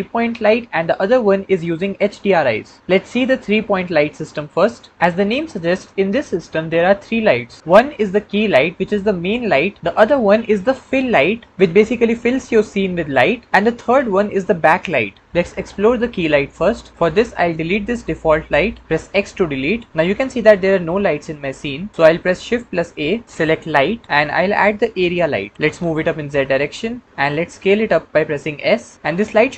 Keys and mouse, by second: 18.4 click, 18.9 x, 22.4 shift+a, 25.6 g, 26.2 z, 27.5 s.